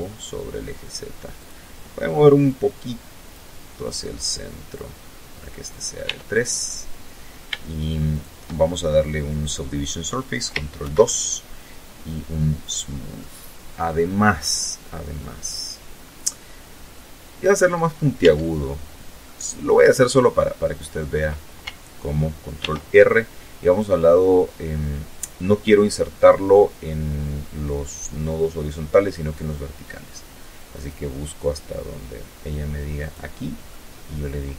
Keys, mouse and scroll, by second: 1.0-2.1 drag, 2.4-3.4 drag, 3.9 middle click, 4.6 Tab, 5.2 middle click, 6.7 shift+right click, 9.3 ctrl+2, 11.2 click, 11.7 middle click, 12.4-13.5 scroll up 2, 13.5 middle click, 13.9 scroll down 2, 16.7 Tab, 17.7 middle click, 21.0 ctrl+r, 29.3 click, 31.5 click, 32.2-34.5 middle drag.